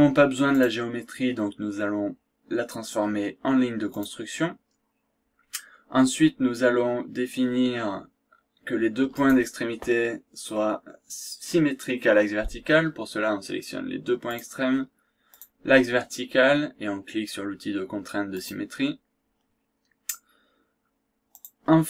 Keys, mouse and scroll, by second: 0.6 click, 3.9 click, 9.1 click, 14.4 click, 15.4 click, 18.3 click, 21.3 click.